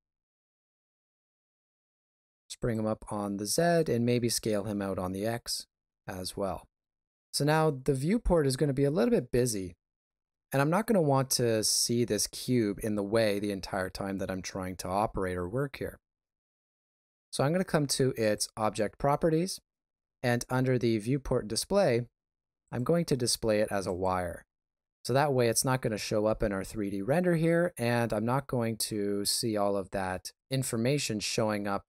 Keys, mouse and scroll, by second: 1.0 g, 3.2 shift+middle click, 4.1 s, 18.2 click, 22.6 click, 27.7 middle click, 31.5 middle click.